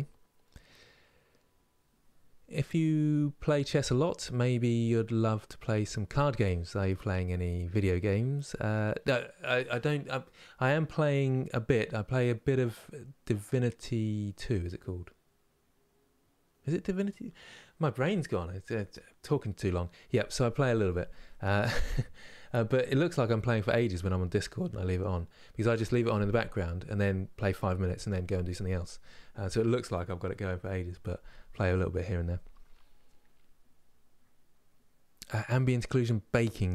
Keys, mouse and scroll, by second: 21.9-36.7 middle drag.